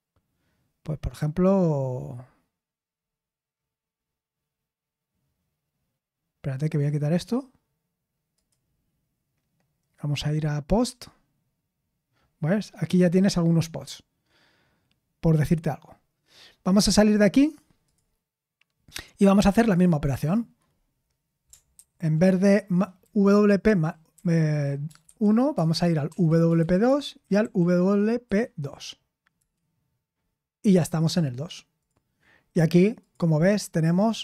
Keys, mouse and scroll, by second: 11.2 click, 22.9 Left, 23.6 Left, 23.6 Left, 23.7-24.8 Left, 24.8 BackSpace, 25.0 BackSpace, 25.5 Tab, 26.0 Right, 26.4-28.2 typing, 26.8 Tab, 29.3 Return.